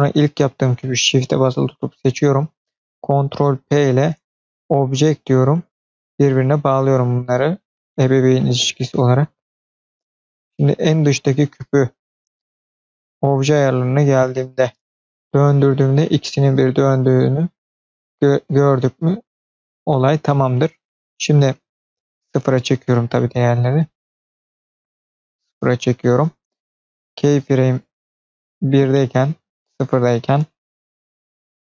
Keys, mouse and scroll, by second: 3.4 ctrl+p, 7.6-8.2 middle drag, 9.6 click, 13.0 click, 14.8-19.5 drag, 20.0 click, 22.0-23.0 drag, 23.8-24.3 scroll up 1, 24.3-25.4 drag, 27.5 click, 29.2 click.